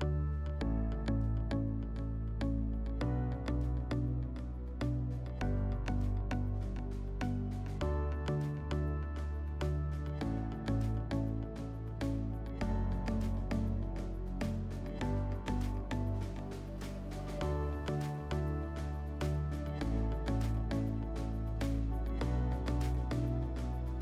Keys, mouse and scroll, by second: 5.6-11.2 drag, 11.4-12.5 drag, 12.5-14.7 middle drag, 14.8-22.5 drag, 22.6 click.